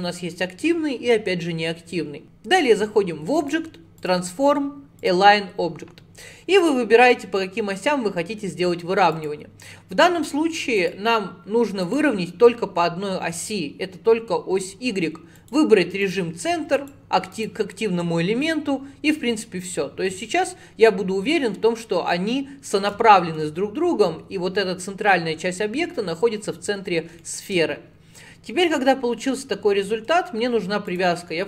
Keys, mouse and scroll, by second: 3.4-6.4 drag, 6.7 click, 9.2 click, 10.8 click, 11.9 click, 15.4 click, 16.8 click, 22.2-25.2 middle drag, 27.2-30.4 shift+middle drag, 30.9-31.4 drag.